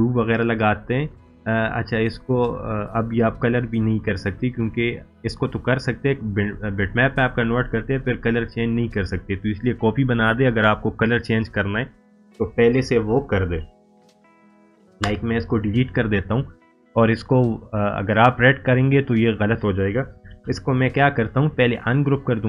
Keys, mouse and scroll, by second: 6.4 click, 6.5-8.5 drag, 15.0 Delete, 16.4 click, 20.3 ctrl+z, 21.6-22.4 drag.